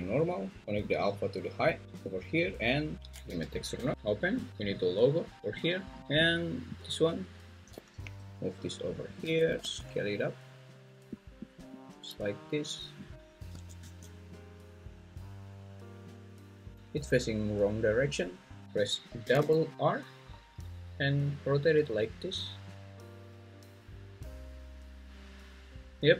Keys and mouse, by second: 0.9 click, 1.2-2.1 drag, 3.3 g, 8.0 g, 9.1 click, 9.6 s, 11.2 click, 13.1 Tab, 13.5 s, 13.8 x, 19.2 r, 19.4 r.